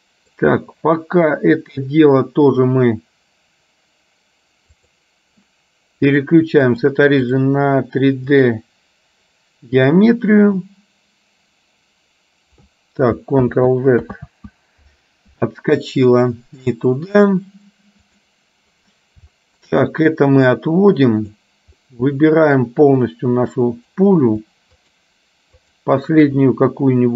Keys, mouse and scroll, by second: 6.3-7.5 drag, 8.4-10.0 drag, 13.6 ctrl+z, 16.8-18.4 drag, 19.4 shift+middle click, 20.5-21.5 drag, 21.9-22.8 scroll up 1, 23.1-24.1 drag.